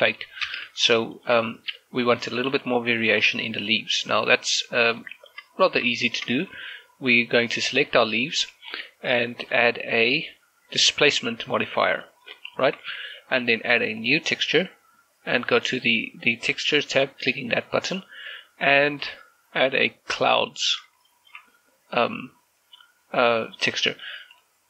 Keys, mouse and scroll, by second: 1.1 scroll up 1, 1.2 shift+space, 2.0 shift+middle click, 3.3 click, 5.1-5.4 scroll up 1, 5.4 middle click, 5.9 shift+middle click, 6.5 scroll down 1, 6.8 shift+middle click, 7.1 middle click, 8.4 right click, 8.6 g, 9.0 right click, 10.3 click, 12.8 click, 13.4 shift+middle click, 14.8 click, 17.3 click, 19.8 click, 21.9 shift+middle click.